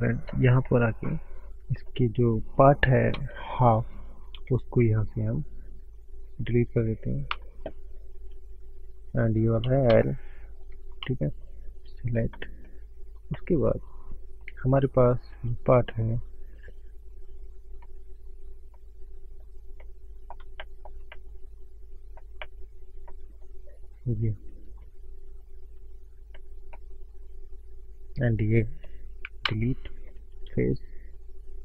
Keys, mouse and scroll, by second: 0.9 middle click, 2.0 middle click, 3.2 Tab, 4.4 3, 5.0 click, 7.3 Delete, 9.2 click, 11.0 Delete, 11.0 l, 12.4 middle click, 13.4 middle click, 17.8 middle click, 18.7 scroll up 1, 18.8 middle click, 19.9 middle click, 20.9 shift+middle click, 21.1 middle click, 22.5 middle click, 23.7 middle click, 25.5 alt+middle click, 26.3 scroll up 1, 28.3 alt+shift+click, 29.5 Delete.